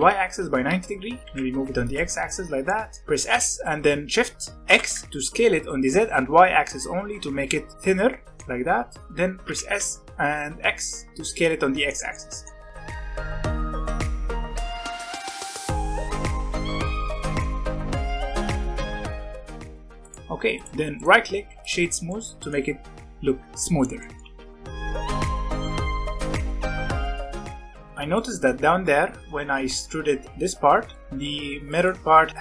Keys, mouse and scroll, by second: 1.2 g, 2.6 middle click, 3.2 s, 8.3 middle click, 8.5-9.2 scroll up 1, 9.2 scroll up 1, 9.4 s, 11.1-12.9 middle drag, 12.9 Tab, 13.0-14.9 typing, 13.6 alt+a, 13.9 scroll up 1, 16.5 shift+middle click, 16.9-18.4 typing, 17.1 shift+middle click, 17.2 alt+a, 17.6 shift+middle click, 17.8 scroll up 2, 19.3 middle click, 19.4 Tab, 19.5 scroll down 3, 19.5 middle click, 19.6 alt+a, 19.7 scroll up 3, 20.0 click, 20.5 click, 20.9-22.0 right drag, 22.0-22.7 middle drag, 22.7-24.0 scroll down 1, 24.0 middle click, 24.2 alt+a, 24.5 scroll down 2, 24.5-26.3 middle drag, 26.5 middle click, 27.2-28.5 shift+middle drag, 28.5-29.1 scroll up 2, 29.1-29.6 scroll down 1, 29.6-30.5 scroll down 1, 30.9-32.4 middle drag.